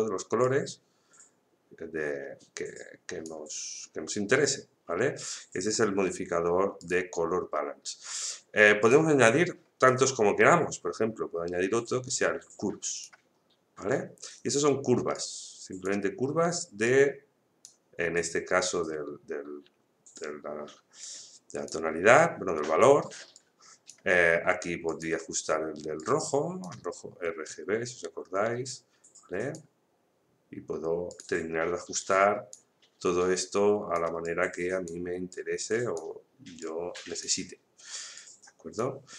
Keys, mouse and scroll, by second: 5.7-6.8 scroll up 1, 6.8 click, 12.9-21.0 drag, 21.0-39.1 drag.